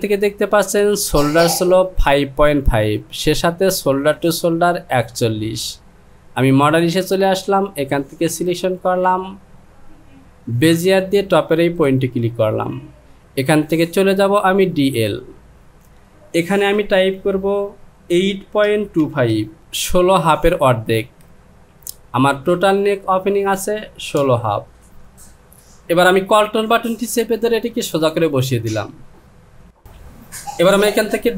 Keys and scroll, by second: 18.2 KP_8, 18.6 KP_Decimal, 19.0 KP_2, 24.2 Return.